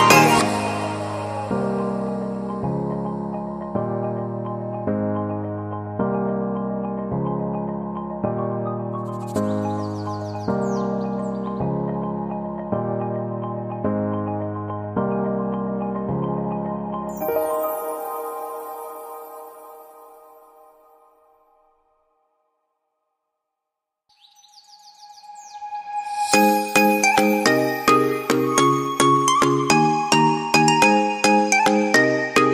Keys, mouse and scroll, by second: 3.7 right click, 5.5 double click, 10.6 F2, 18.2 F4, 21.8 Delete, 24.5 F4, 27.4 right click.